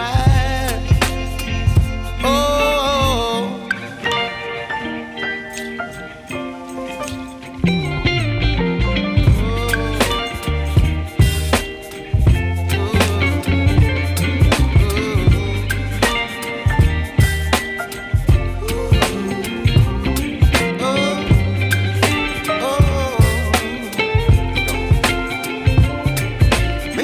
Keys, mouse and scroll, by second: 3.1-11.5 drag, 6.2 typing, 14.9 click, 15.1 click, 17.2 ctrl+c, 18.3 click, 19.3 ctrl+v, 20.7-23.2 drag, 23.2-25.4 shift+drag, 25.4-27.0 drag.